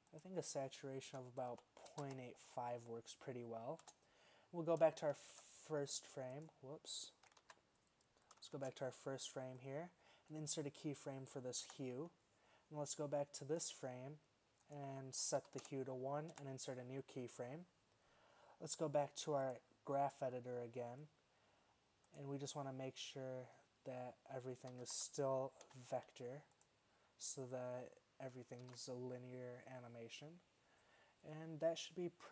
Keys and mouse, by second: 3.9 space, 7.5 alt+a, 8.6 shift+Left, 11.8 i, 16.4 i, 22.8-25.7 middle drag, 24.8 a, 25.0 a, 25.7 v, 28.7 alt+a.